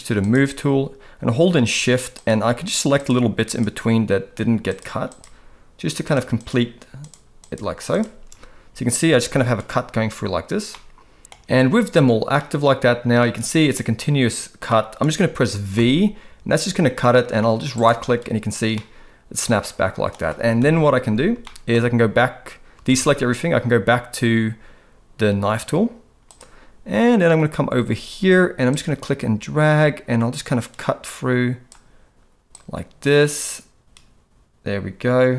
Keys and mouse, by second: 2.2 shift+click, 5.1 shift+click, 6.4 shift+click, 7.9 shift+click, 10.7 middle click, 12.4 middle click, 14.8 middle click, 15.7 v, 18.7-20.1 middle drag, 20.6 KP_7, 21.4 shift+middle click, 22.9 alt+a, 26.2 click, 28.7-35.3 drag.